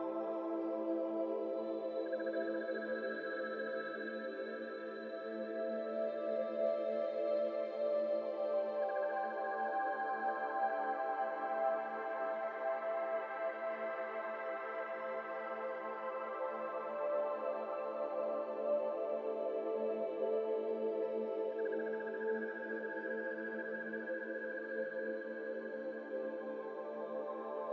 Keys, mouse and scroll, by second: 0.2-1.9 middle drag, 1.9 click, 2.2-4.2 shift+middle drag, 4.2-7.3 drag, 12.4 click, 13.4-16.4 drag, 16.4 p, 19.5 click, 20.8-22.1 drag, 22.1-22.5 middle drag, 22.5 click, 22.9 scroll down 3, 23.2-24.9 shift+middle drag, 24.9 Tab, 25.2 middle click, 25.5 scroll up 1, 25.7 3, 25.9 click, 26.4 shift+click, 26.7 shift+click.